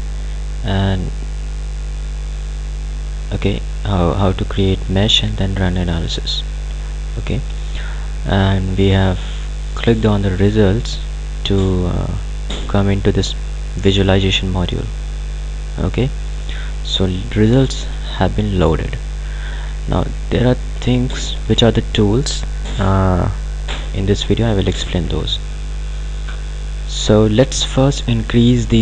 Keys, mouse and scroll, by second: 10.4 click, 15.4-15.7 scroll up 1, 17.6 scroll down 1, 17.8-23.8 ctrl+alt+drag.